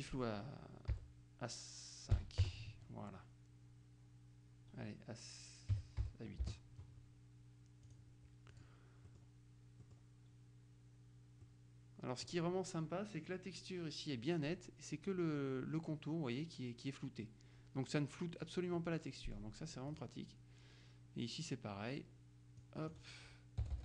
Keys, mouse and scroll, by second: 1.0 Delete, 2.2 KP_5, 2.5 KP_Enter, 5.8 KP_8, 6.1 Delete, 6.5 Return, 8.0 click, 9.9-10.5 scroll up 1, 11.6-12.8 scroll up 1, 18.8-19.9 scroll up 1, 22.7 click, 23.7 BackSpace.